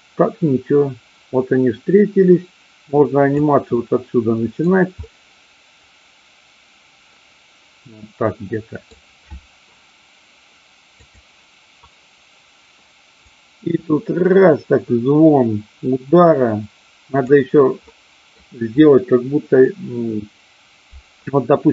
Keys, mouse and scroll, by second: 3.7-4.6 middle drag, 5.0-9.0 middle drag, 11.0 click, 13.2-17.2 drag, 17.9 middle click.